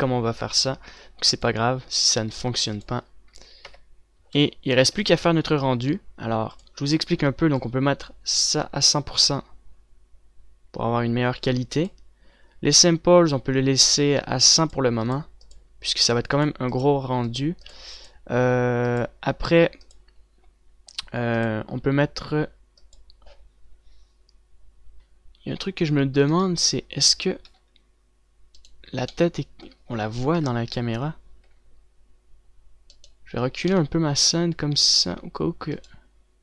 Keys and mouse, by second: 2.2 click, 3.1-3.4 a, 3.8 ctrl+s, 4.8 KP_0, 5.4 a, 5.7 a, 6.2 ctrl+s, 13.0-27.5 drag, 28.7 g, 31.3 KP_0, 34.5 g.